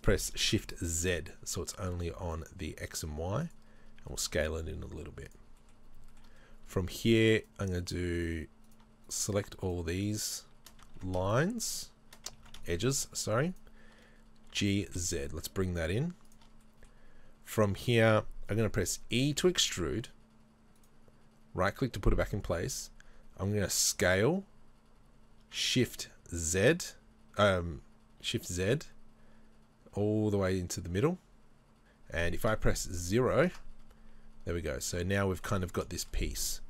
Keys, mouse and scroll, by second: 3.7 scroll down 1, 5.3 click, 6.1-7.4 shift+middle drag, 6.3-7.4 scroll up 2, 7.4-11.0 alt+right drag, 11.0 ctrl+z, 11.3-12.4 right drag, 12.4 ctrl+z, 12.6-14.5 shift+right drag, 14.5 g, 16.6-19.0 middle drag, 19.0 e, 23.6 s, 34.1-34.6 scroll down 3, 34.6-36.6 middle drag, 35.0 Tab.